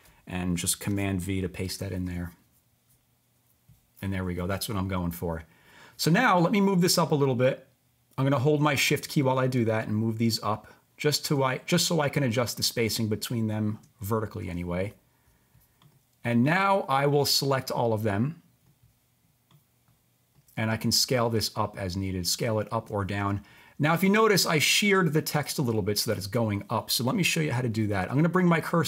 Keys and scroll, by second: 0.9 super+v, 1.7 Return.